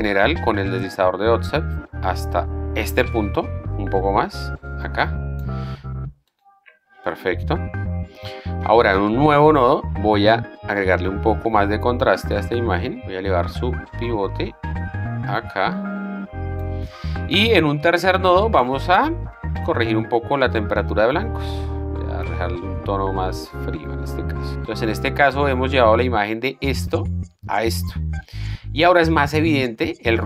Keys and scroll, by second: 9.5 alt+s, 17.9 alt+s, 26.4 shift+d.